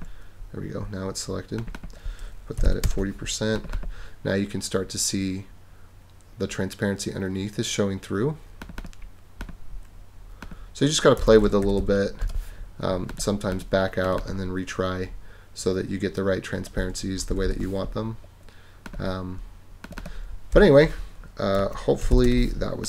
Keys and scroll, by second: 2.3-3.1 typing, 11.2-12.3 typing, 17.3 super+-, 20.8-22.6 typing.